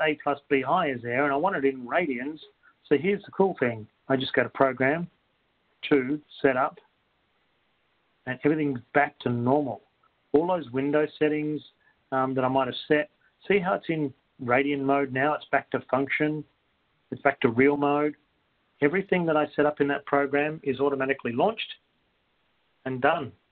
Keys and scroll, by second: 5.6 2, 7.1 Return, 13.1 2.